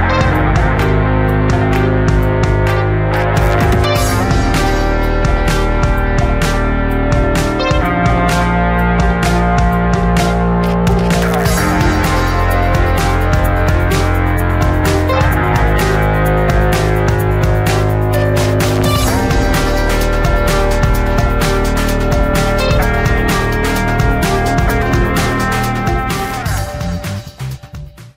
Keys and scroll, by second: 16.4 space, 18.1 Tab, 18.9 space, 20.3 space.